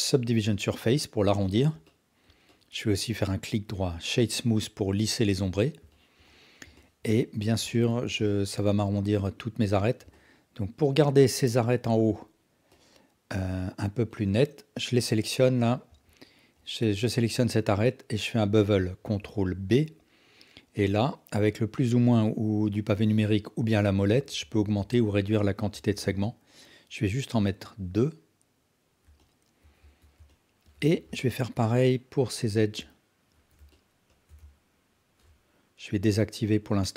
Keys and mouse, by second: 1.8 alt+click, 5.5 alt+drag, 5.9 ctrl+alt+drag, 6.2-6.6 alt+drag, 6.8 ctrl+alt+drag, 7.1 alt+shift+drag, 7.7 alt+drag, 8.3 ctrl+alt+drag, 9.6 Tab, 10.1-10.4 alt+drag, 11.8 2, 12.7-13.3 alt+drag, 14.1-14.9 alt+drag, 16.1 alt+drag, 16.5 alt+click, 19.0 ctrl+b, 29.3 alt+click, 29.8 Tab, 30.3 alt+click, 30.8 Tab, 31.2 alt+click.